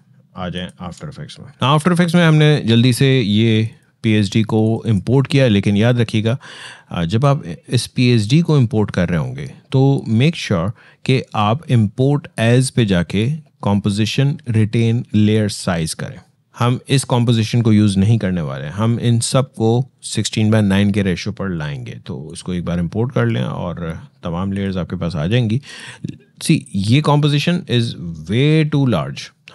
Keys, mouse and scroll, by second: 0.3 alt+click, 3.3 click, 7.9 click, 22.1 click, 27.8-28.5 scroll down 1.